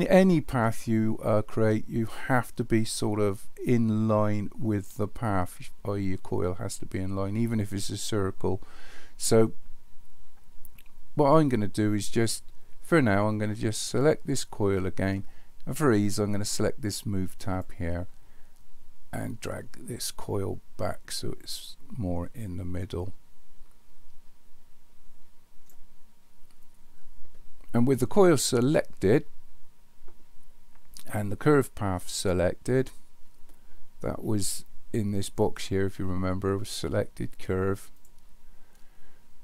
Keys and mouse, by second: 14.1 click, 17.5 click, 19.4-25.7 drag, 35.4-38.1 drag.